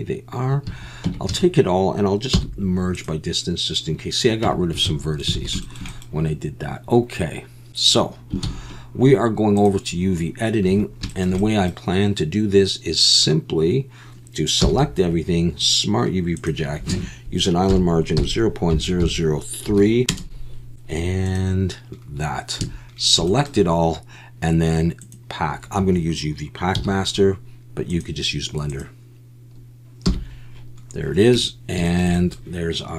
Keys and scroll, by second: 0.7 a, 1.1 Tab, 1.3 a, 2.3 m, 4.4 Tab, 4.9 a, 8.4 ctrl+s.